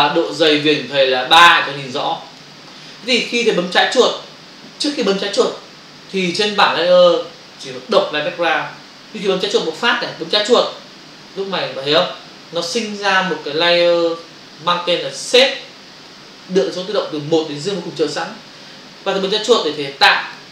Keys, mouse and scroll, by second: 0.1 click, 2.3 click, 10.3 click, 19.6 click.